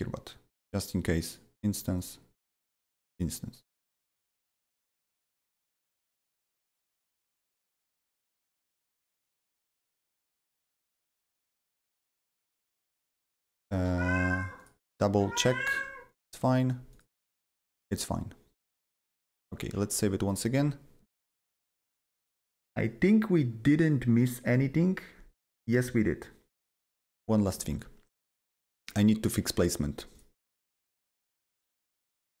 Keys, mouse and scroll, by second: 1.9-5.3 drag, 5.3-7.3 drag, 7.3-14.6 drag, 14.6 click, 16.9 click, 18.5 click, 19.1 click, 19.6 ctrl+s, 21.4 click, 27.5 click, 28.7 ctrl+click, 29.5 ctrl+click, 30.1 ctrl+click, 30.1 ctrl+click, 30.6 ctrl+click.